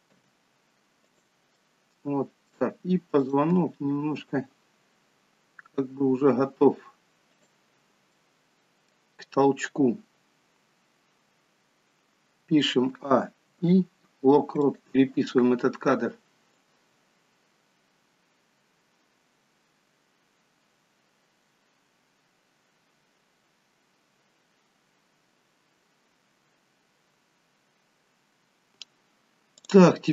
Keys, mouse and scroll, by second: 0.2 g, 1.8 middle click, 3.3 click, 3.6 g, 7.9 scroll down 4, 8.2 middle click, 12.8 a, 13.5 a, 13.5 i, 16.7 click, 29.6 click.